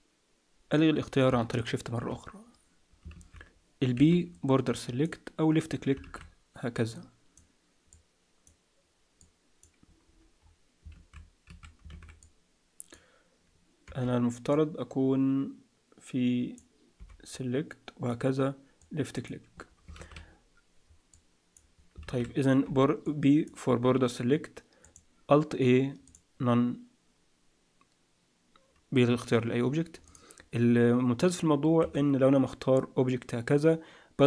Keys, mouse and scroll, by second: 1.5 shift+click, 3.1 alt+a, 3.9 b, 6.0 alt+a, 6.8 click, 7.9 click, 10.0 click, 10.0-10.4 scroll down 2, 10.4-10.8 scroll up 4, 10.9 alt+a, 11.4 a, 12.2 click, 13.8 t, 14.5 click, 16.9 t, 17.3 click, 18.8 click, 20.0 alt+a, 21.1 click, 22.0 alt+a, 22.6 b, 24.8 click, 30.0 click, 31.8 z.